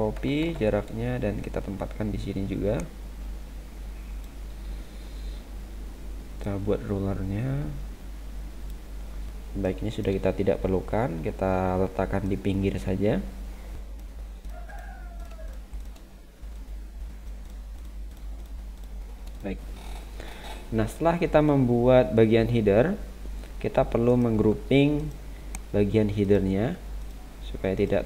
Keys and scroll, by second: 0.1 ctrl+c, 0.4 ctrl+v.